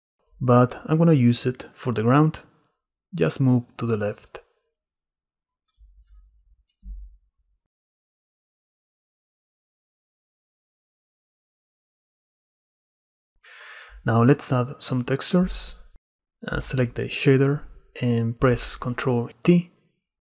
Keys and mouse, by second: 0.4-2.1 drag, 2.1-2.7 middle drag, 2.7-3.1 drag, 3.1 middle click, 3.2 drag, 3.8-4.8 drag, 4.8-5.8 middle drag, 5.8 click, 12.9-14.1 drag, 14.4 x, 14.6 click, 17.7 ctrl+i, 18.5-20.0 drag.